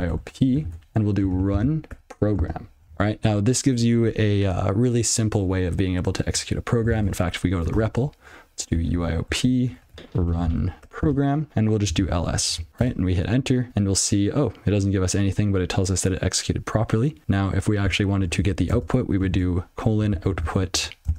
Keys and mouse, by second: 0.0-2.4 typing, 7.8-12.0 typing, 12.5 ctrl+f, 13.3 Return, 17.2 click, 18.3 alt+p, 18.4 ctrl+b, 19.2-21.1 typing.